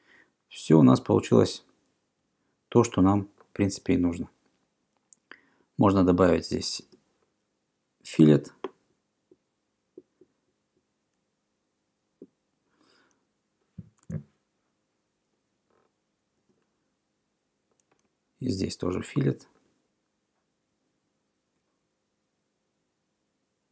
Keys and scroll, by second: 6.9 f, 14.1 Return, 16.4 f.